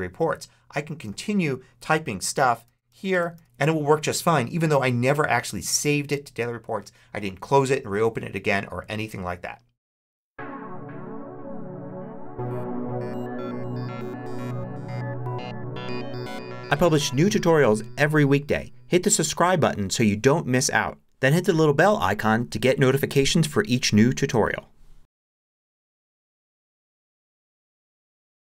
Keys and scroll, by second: 0.9 super+space, 1.4-3.5 typing.